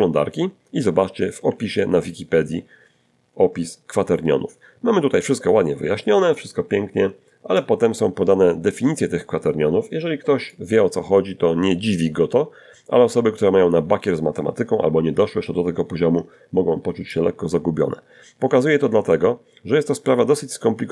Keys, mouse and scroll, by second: 0.2-1.3 ctrl+scroll up 4, 1.3 ctrl+middle click, 5.8-8.9 drag, 15.3-20.9 drag.